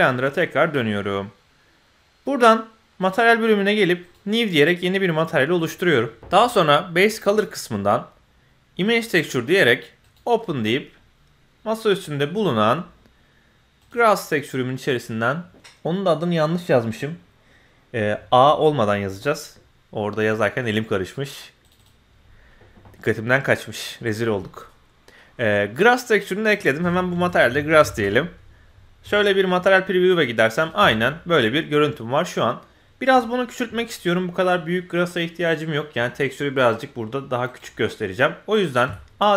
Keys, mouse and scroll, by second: 3.0 click, 4.0 click, 7.3-8.9 drag, 10.0 click, 26.5-28.0 drag, 27.8 s, 29.0 z, 30.0 middle click, 30.6 click, 30.8 Tab, 31.1-32.6 middle drag, 32.8-33.2 scroll up 2, 33.2-33.5 middle drag, 33.7-34.1 scroll up 2, 34.1-34.9 scroll down 1, 35.9-36.2 scroll down 1.